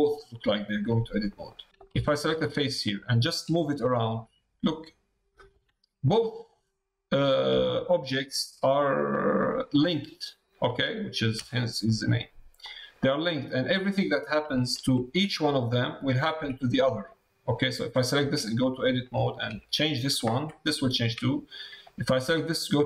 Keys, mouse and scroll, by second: 1.2 click, 1.7 click, 1.7 3, 2.0 shift+click, 2.4 click, 3.7 g, 6.5 click, 7.5 g, 9.4 middle click, 11.8 middle click, 16.4 Tab, 17.0 click, 18.2 Tab, 22.2 Tab.